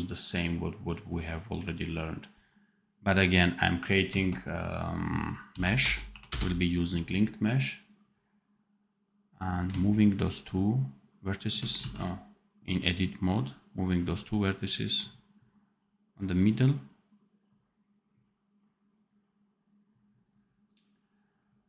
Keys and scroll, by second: 11.7 ctrl+z.